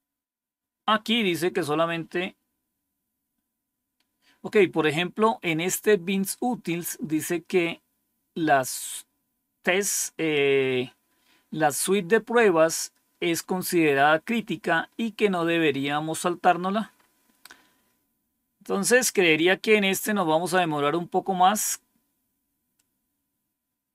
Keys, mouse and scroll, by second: 3.5-3.9 scroll down 3, 4.9-10.8 scroll up 2, 10.8-14.7 scroll up 1, 14.7 scroll down 2, 15.3-15.6 scroll down 3, 16.9 scroll up 2, 18.6-19.2 scroll up 1, 20.4-21.3 scroll down 6, 22.7-23.9 drag.